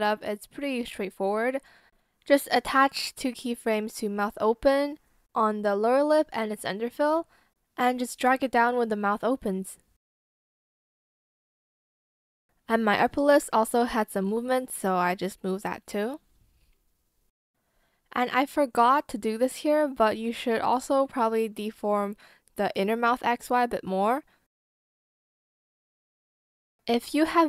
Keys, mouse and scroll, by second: 5.7 shift+click, 12.1 ctrl+click, 13.7 shift+click, 14.7 ctrl+shift+z, 16.0 ctrl+z, 16.4 shift+click, 17.4 ctrl+z, 20.4 Escape, 27.2 ctrl+click.